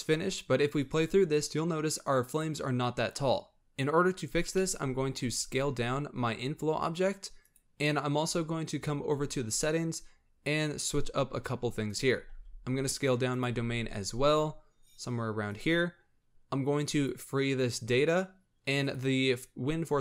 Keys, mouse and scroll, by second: 1.3-3.9 drag, 4.0 scroll up 2, 4.4-5.2 shift+middle drag, 5.2 s, 9.0-9.6 scroll down 7, 10.0-10.3 scroll down 4, 11.8 click, 12.2 s, 13.7 g, 16.8-18.8 drag.